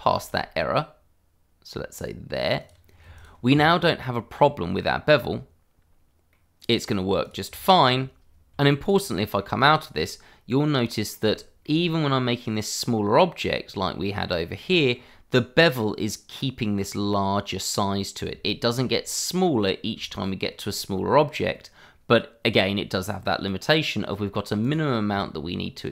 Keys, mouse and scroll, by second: 0.1 e, 2.6 click, 2.8-3.1 scroll down 1, 3.1 click, 5.1-5.4 scroll up 1, 6.3 middle click, 7.2 click, 7.6 middle click, 7.7 shift+middle click, 7.8-8.5 scroll up 1, 8.5 Tab, 8.8 click, 9.1 middle click, 9.8 shift+middle click, 10.8 middle click, 11.5 shift+middle click, 14.7 shift+middle click, 15.0-17.0 scroll up 1, 18.4 shift+middle click, 20.1 shift+middle click, 20.7 scroll up 1, 21.5 middle click, 23.6 Tab, 24.1 click.